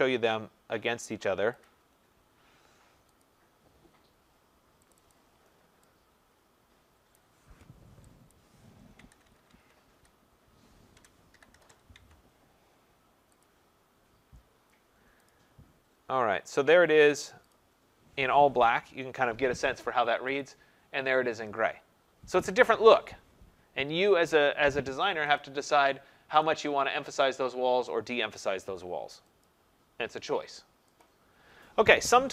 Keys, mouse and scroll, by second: 1.6 click, 3.2 click, 5.0 click, 5.1 click, 7.2 click, 8.3 click, 8.9-10.0 typing, 9.0 Tab, 9.3 Tab, 9.5 Tab, 11.0-12.1 typing, 13.3 Tab, 13.5 click, 15.3 click, 17.5 click, 20.4 click, 25.4 click, 26.4 click, 27.2 click, 29.4 click, 31.0 click.